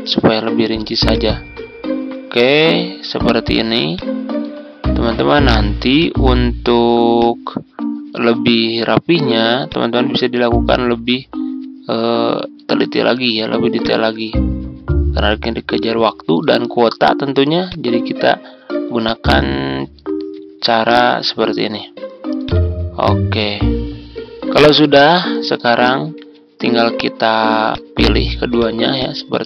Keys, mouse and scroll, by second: 20.4-20.8 ctrl+scroll up 1, 22.4-24.2 drag, 24.4-24.7 ctrl+scroll down 1, 25.7 ctrl+scroll down 1, 27.6 click, 28.5 shift+click.